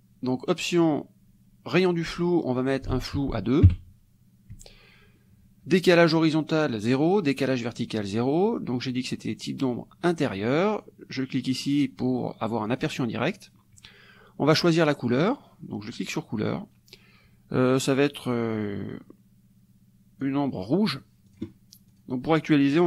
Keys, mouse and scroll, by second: 2.7 ctrl+click, 3.7 KP_2, 12.8 click, 15.2 click, 18.3-21.0 drag, 21.3-22.4 drag.